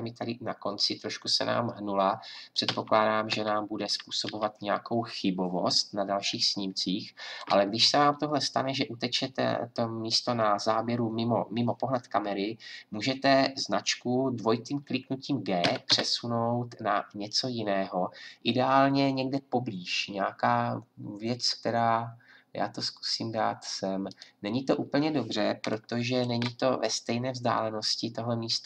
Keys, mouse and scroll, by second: 2.6 Right, 3.3 Right, 3.8 Left, 4.2 Right, 15.6 g.